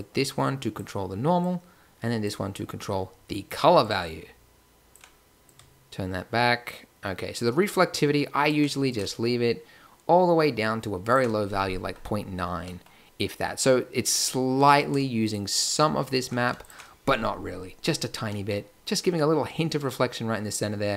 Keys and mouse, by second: 5.3 middle click, 7.3 middle click, 8.3 click, 8.9 click, 9.7 click, 10.1 click, 12.8-14.5 middle drag, 14.5 click, 15.4-17.0 drag.